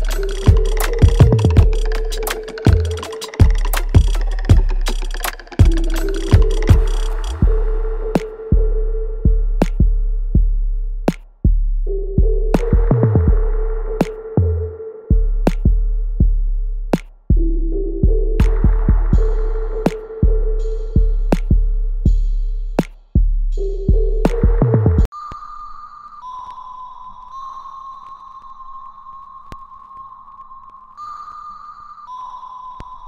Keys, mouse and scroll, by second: 0.6-2.2 alt+drag, 2.2 alt+middle click, 2.5 alt+right click, 3.6-5.2 alt+drag, 5.2 right click, 5.6 alt+click, 6.7-9.2 alt+drag, 9.9 alt+right click, 10.5 alt+click, 11.9 alt+right click, 12.5 click, 13.0 alt+right click, 13.7-16.3 alt+drag, 16.3 alt+middle click, 17.2 click, 17.9 alt+right click, 18.8 right click, 19.6 click, 20.7 right click, 22.5 click, 24.6 click, 26.9 alt+right click, 27.3-28.7 alt+drag, 28.7 alt+right click, 29.8-32.9 drag, 32.9 right click.